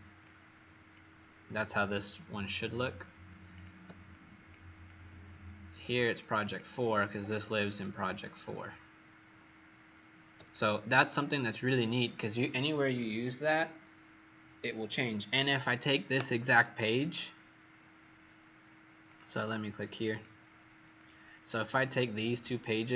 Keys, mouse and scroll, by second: 4.0 click, 10.4 click, 16.9 click, 21.9 shift+click.